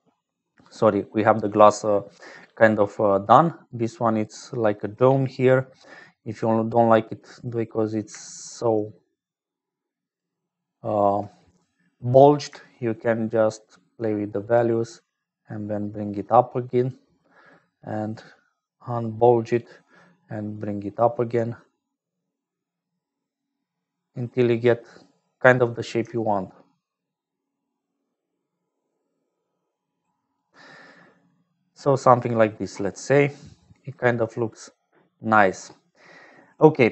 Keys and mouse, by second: 1.9 click, 3.5-4.6 drag, 5.0 click, 6.0 click, 8.8-10.2 shift+drag, 10.7 shift+click, 12.9-16.9 shift+drag, 18.2-19.6 shift+drag, 20.6-25.6 shift+drag, 26.6-30.4 shift+drag, 31.1 click, 32.9-34.7 drag.